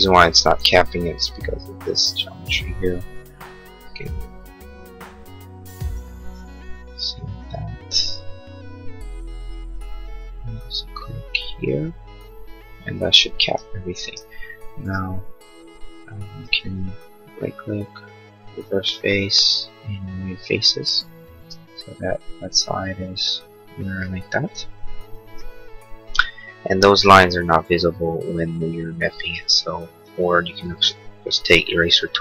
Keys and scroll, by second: 16.3 space, 21.5 space, 30.6 e.